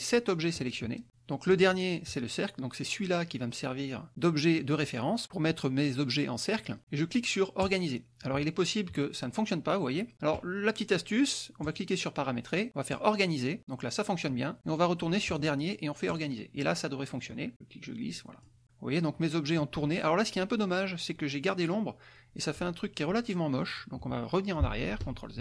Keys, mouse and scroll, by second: 2.6 click, 8.8 click, 12.6 click, 13.6 click, 16.6 click, 17.4 click, 18.6 click, 25.1 click.